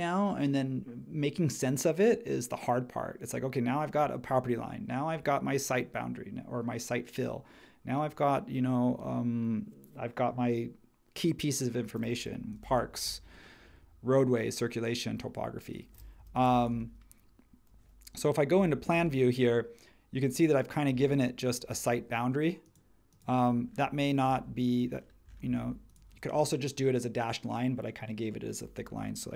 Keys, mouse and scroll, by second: 12.2 h, 16.2 h, 16.7 space, 18.8 super+1.